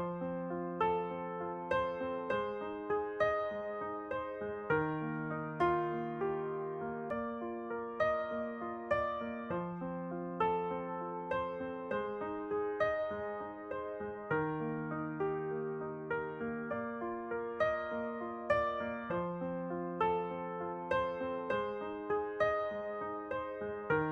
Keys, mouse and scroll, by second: 1.3-4.8 drag, 4.2-6.1 middle drag, 7.2-9.5 drag, 8.6-10.6 middle drag, 10.6 alt+c, 12.5 z, 15.0-20.0 drag, 19.5-21.1 middle drag, 21.2-23.0 middle drag, 23.0-24.1 drag.